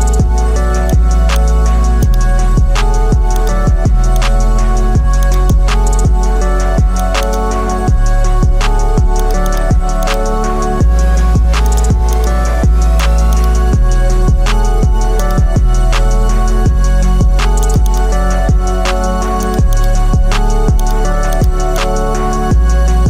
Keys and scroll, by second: 2.7 ctrl+t, 7.8 Return, 8.7 ctrl+t, 15.9 Return.